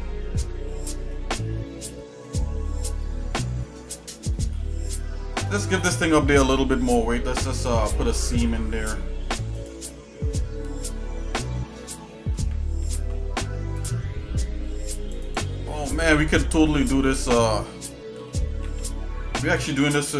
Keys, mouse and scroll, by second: 1.4 middle click, 2.2 middle click, 3.0 middle click, 3.6 middle click, 4.3 middle click, 4.9 shift+middle click, 6.8 scroll up 1, 7.6 click, 8.3 Tab, 8.9 scroll up 1, 9.5 click, 12.9 ctrl+r, 18.2 g.